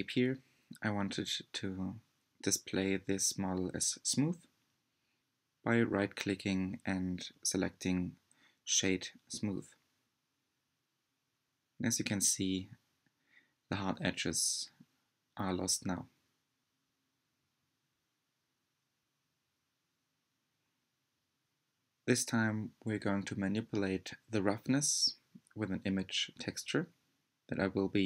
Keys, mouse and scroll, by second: 1.8-4.4 middle drag, 5.3-7.4 right drag, 7.4-12.5 middle drag, 12.5 scroll down 3, 14.1-14.6 scroll down 4.